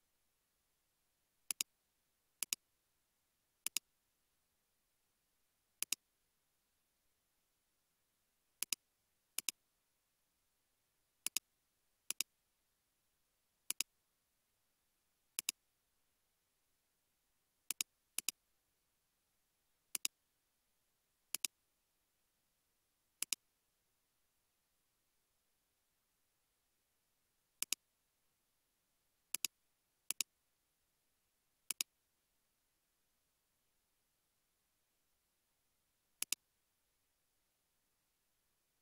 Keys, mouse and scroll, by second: 0.1 space, 0.9 space, 6.2 space, 10.3 typing, 12.6 typing, 18.2 double click, 19.1 typing, 20.2 typing, 28.6-29.5 scroll down 1, 32.1-32.9 typing, 37.9 typing.